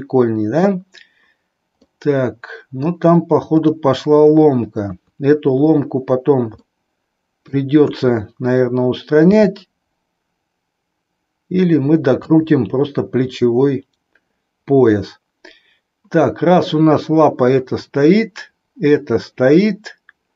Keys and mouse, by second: 1.9-3.0 middle drag, 4.9 KP_3, 6.6-7.6 middle drag, 7.9 KP_3, 9.1 r.